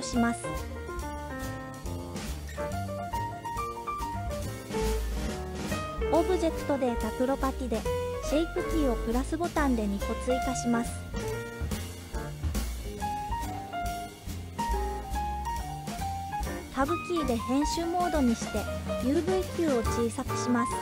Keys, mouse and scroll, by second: 2.0 KP_1, 5.5 click, 7.8 click, 8.5 click, 9.7-12.9 drag, 16.1 Tab, 17.6 s.